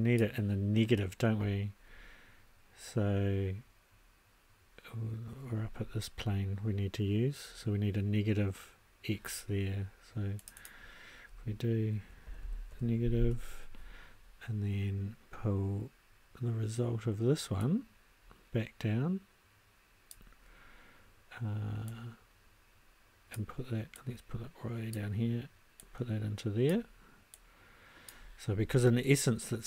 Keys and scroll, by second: 12.3 n, 12.7 g, 13.2 Return.